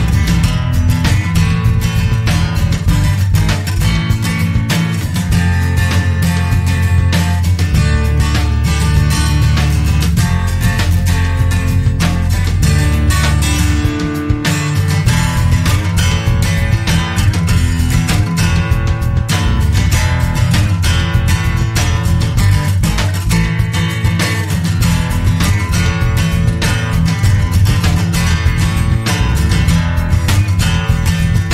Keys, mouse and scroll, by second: 0.3 click, 2.1 1, 2.6 2, 3.7-4.0 scroll up 1, 4.8 1, 6.6 0, 8.2 scroll down 2, 8.7 click, 10.5 click, 11.1 click, 13.2 click, 17.2 scroll up 1, 18.9 1, 19.4 2, 20.7 click, 22.7-23.1 scroll down 1, 23.4 scroll up 2, 24.4 click, 26.4-26.8 scroll up 2, 26.8 click, 28.5-28.8 scroll up 1, 29.0-29.4 scroll down 1, 29.7 scroll up 1, 31.0 click.